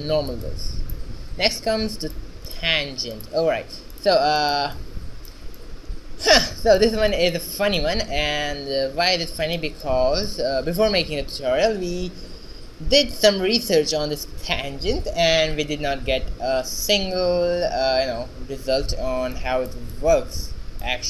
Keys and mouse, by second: 2.1-6.0 right drag, 3.9 x, 8.6 q.